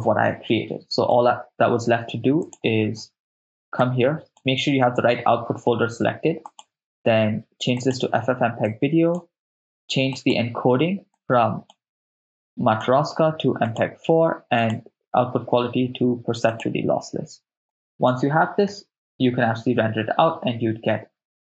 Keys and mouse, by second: 0.6 shift+space, 1.2 shift+space, 2.4 click, 3.8 click, 6.5-8.0 drag, 8.7 click, 10.2 click, 11.2 click, 12.7-13.8 drag, 14.6-16.7 drag, 17.7 click, 18.9 shift+space.